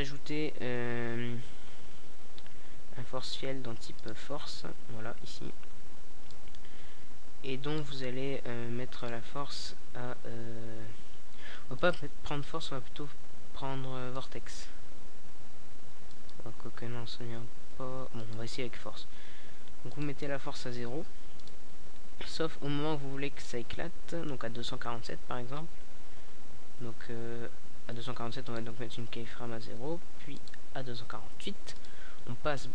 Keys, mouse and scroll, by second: 1.1-3.3 drag, 5.3-7.1 drag, 9.1-11.0 drag, 11.2 click, 17.3-18.8 drag, 19.5-22.7 drag, 25.5-29.0 drag, 29.0 alt+a, 30.3 a, 31.4 alt+a.